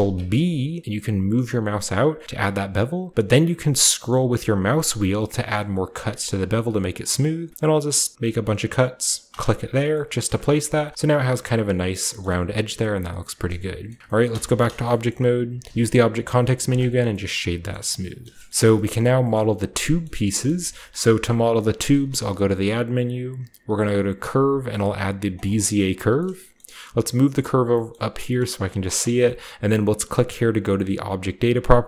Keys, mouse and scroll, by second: 3.9-8.1 scroll up 3, 8.1-9.2 scroll up 1, 9.2 click, 9.2 scroll up 1, 10.2 middle click, 10.5-11.9 shift+middle drag, 10.6-11.9 shift+scroll up 2, 12.2 shift+middle click, 13.5 Tab, 13.8 middle click, 14.2 middle drag, 14.2 Tab, 14.5-15.0 scroll down 1, 15.0-15.8 shift+scroll up 1, 15.7 w, 16.6-17.0 drag, 17.1-18.3 drag, 17.6 scroll up 1, 17.6-17.9 middle drag, 17.7 a, 17.8 scroll down 1, 18.2 middle click, 18.4 shift+middle click, 18.5 ctrl+b, 18.5 drag, 18.5-19.8 scroll down 1, 18.7-19.7 shift+drag, 18.8 middle click, 21.8 shift+a, 25.2 click, 25.9-26.8 scroll down 1, 26.5-27.6 middle drag, 26.8 g, 27.4 click, 27.8-30.6 scroll up 1, 28.4 g, 28.6 drag, 30.9 click.